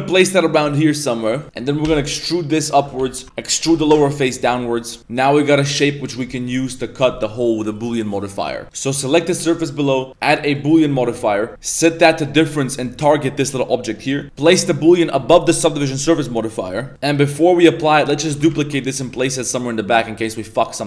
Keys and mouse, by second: 1.8 e, 2.9 z, 3.6 e, 4.4 z, 5.0 Tab, 5.0-6.9 middle drag, 5.0 x, 7.1 middle click, 7.6-8.6 middle drag, 8.6 right click, 9.8 click, 11.8 click, 12.7 click, 14.3-15.1 drag, 18.5 shift+d, 20.6 middle click.